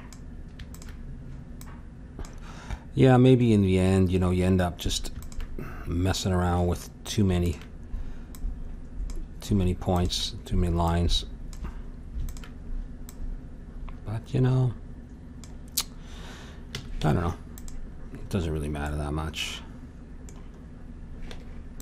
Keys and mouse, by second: 16.7 a, 17.0 Tab, 18.5-21.8 middle drag, 21.3 Tab.